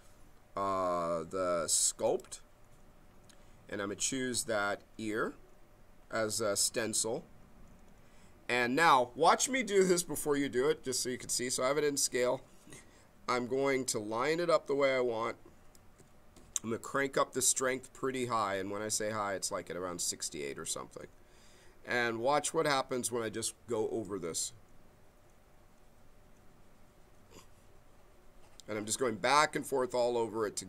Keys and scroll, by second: 13.6 b.